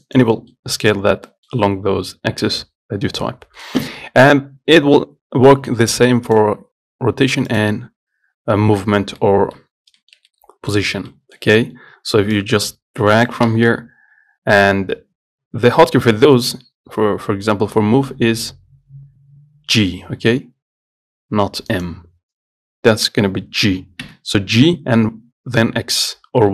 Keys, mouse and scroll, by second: 0.6 scroll down 1, 0.8 middle click, 1.1-1.5 scroll up 1, 1.5-5.7 middle drag, 6.5-9.4 drag, 9.4 middle click, 9.9-10.2 scroll up 1, 10.2-12.6 shift+middle drag, 12.6 click, 13.7 ctrl+z, 20.0 g, 24.3 g.